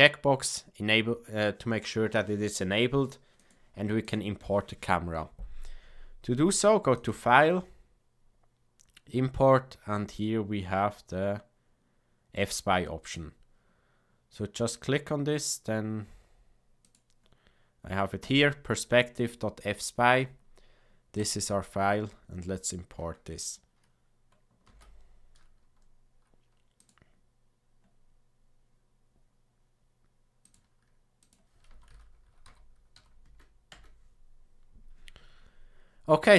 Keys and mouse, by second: 6.9-13.2 drag, 24.7 ctrl+s.